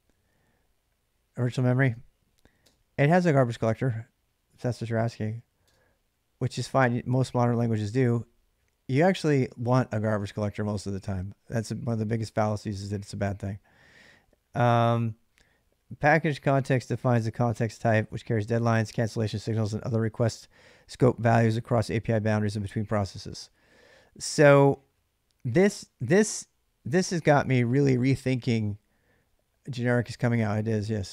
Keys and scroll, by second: 2.4 space, 5.5 space.